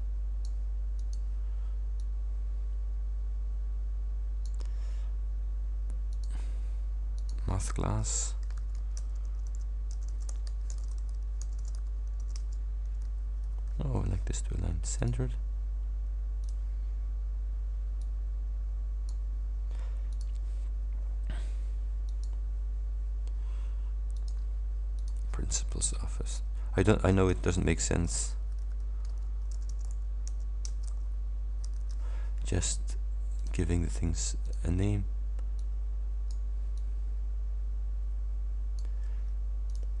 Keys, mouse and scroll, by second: 1.0 click, 2.0-4.7 drag, 6.1 click, 7.2 click, 7.6-9.0 typing, 10.5 shift+c, 10.8 shift+BackSpace, 11.9-14.0 typing, 12.5 shift+Return, 15.1 click, 16.5 click, 18.1-19.4 drag, 20.2 click, 22.1 click, 24.2 click, 25.1 click, 25.8 shift+p, 27.3-31.7 typing, 30.7 Return, 33.4 click, 34.5 click, 35.6 click, 36.8-39.0 drag, 39.7 click.